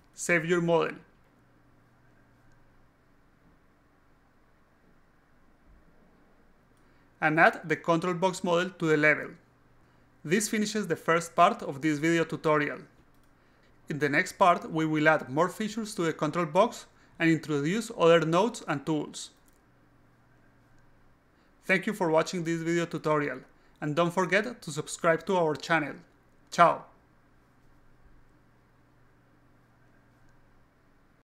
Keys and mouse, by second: 2.6-4.5 alt+drag, 6.3 click, 7.2-8.5 drag, 9.3 e, 9.9-11.2 drag, 11.7 f, 12.2 alt+click, 13.6 click, 14.3-16.6 alt+drag, 17.1-19.2 alt+drag.